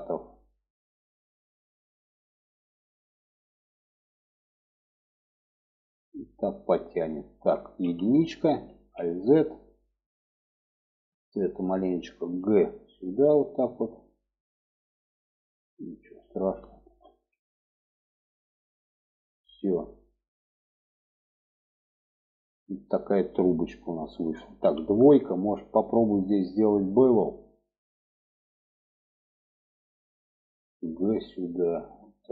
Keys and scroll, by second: 7.2 1, 8.1 alt+z, 11.7 g, 16.4 alt+z, 24.0 2, 30.4 g.